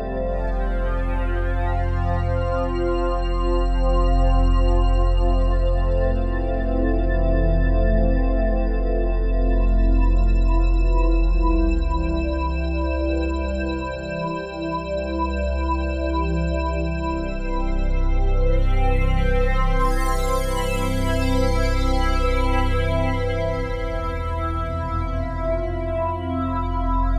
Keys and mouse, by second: 1.0 click, 5.4 click, 7.3 click, 7.5 click, 8.6 click, 8.8 click, 10.8 click, 11.1 click, 12.4 click, 13.3 click, 17.6 click, 18.4 click, 18.8 click, 20.7 click, 21.8-24.2 typing, 24.6 Return.